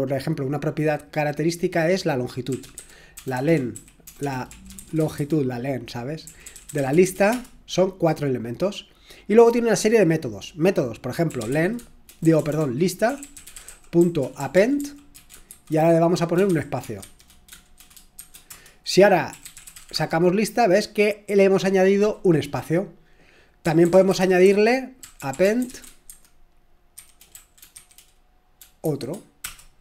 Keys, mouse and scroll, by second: 2.3-3.3 typing, 4.5-7.5 typing, 11.3-20.2 typing, 18.5 Return, 22.9-28.8 typing, 29.4 Return.